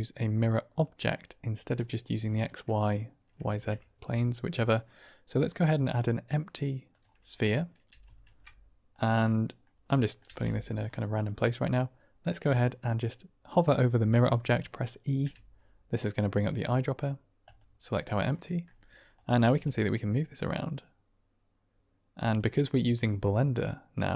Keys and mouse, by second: 2.4-2.8 middle drag, 3.4 shift+a, 7.8 g, 8.2 shift+z, 8.8 click, 9.2-9.5 drag, 9.9 middle drag, 10.2 g, 10.4 z, 10.7 click, 15.1 e, 18.3-18.6 middle drag, 19.0 click, 19.5 g.